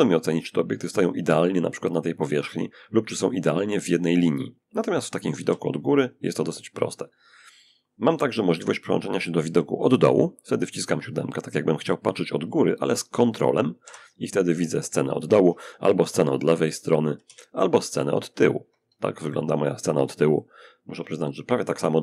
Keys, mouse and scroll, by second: 4.7 7, 13.1 ctrl+7, 15.3 ctrl+3, 16.5 ctrl+1, 19.6-21.5 shift+drag.